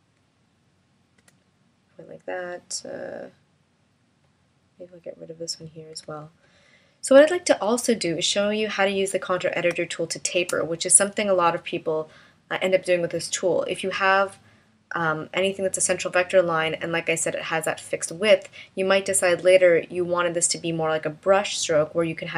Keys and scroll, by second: 1.2 BackSpace, 5.9 BackSpace, 9.7 space.